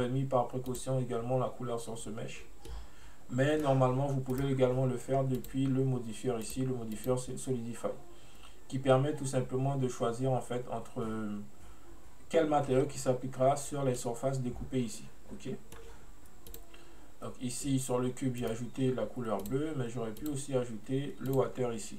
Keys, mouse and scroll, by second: 0.7 click, 2.7-4.4 middle drag, 4.4 right click, 5.4 click, 6.5-7.1 drag, 14.0-16.6 middle drag, 16.6 click, 18.5 right click, 19.5 click, 20.2 click.